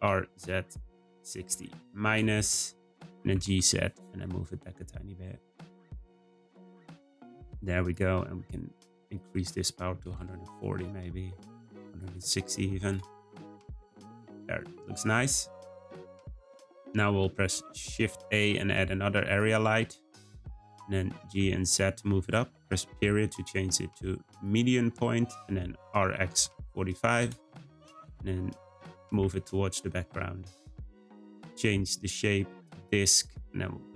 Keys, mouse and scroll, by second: 3.1 g, 6.3 click, 6.8-7.2 scroll down 2, 7.8 click, 9.1-13.9 drag, 15.4 middle click, 16.0-16.8 scroll down 3, 16.8 middle click, 17.5 shift+a, 19.9-21.1 shift+middle drag, 21.1 g, 22.9 ., 25.9 r, 28.1 g, 28.9 g, 31.9-33.9 drag.